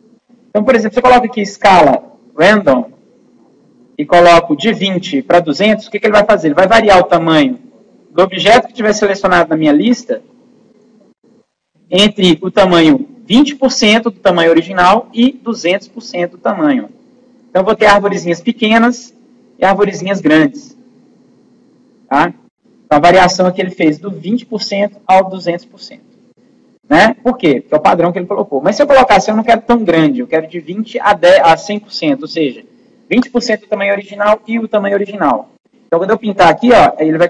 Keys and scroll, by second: 26.7 ctrl+z.